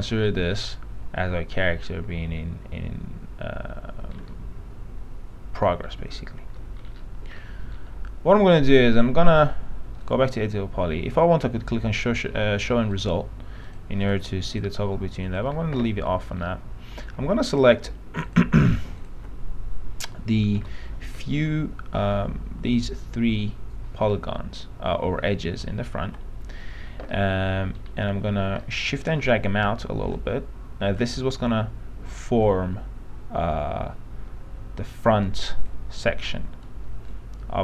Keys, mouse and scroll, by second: 0.4 scroll up 1, 0.8-4.4 alt+middle drag, 6.1 f, 6.7 middle click, 6.9-7.5 scroll up 1, 7.5-8.8 middle drag, 10.2 click, 16.2 middle click, 16.4-17.7 scroll up 1, 17.7 click, 18.4 ctrl+click, 20.8 p, 20.9 scroll down 1, 21.4-24.3 alt+middle drag, 25.5 alt+middle click, 27.9-28.6 scroll up 1, 28.8 middle click, 30.4 shift+click, 31.4 shift+f, 32.6-36.2 drag, 37.4-37.6 shift+drag.